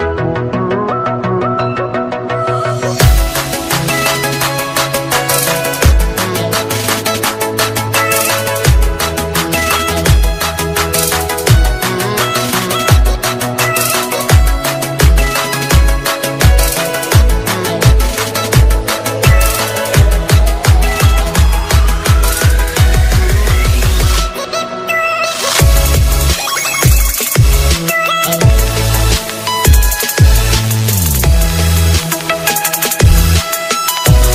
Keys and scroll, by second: 0.5 alt+space, 3.2 ctrl+alt+z.